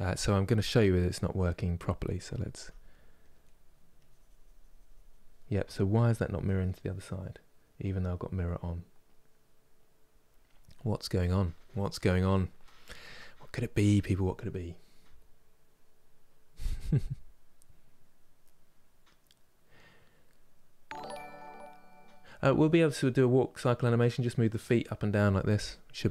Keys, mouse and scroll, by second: 2.2 f, 3.1 middle click, 3.6-5.0 drag, 5.0-26.1 middle drag.